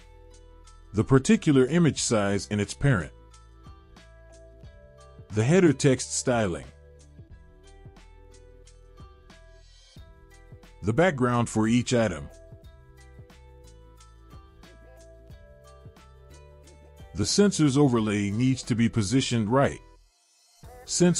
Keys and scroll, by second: 1.6 ctrl+z, 6.1 ctrl+z, 12.8 ctrl+z, 18.3 ctrl+z.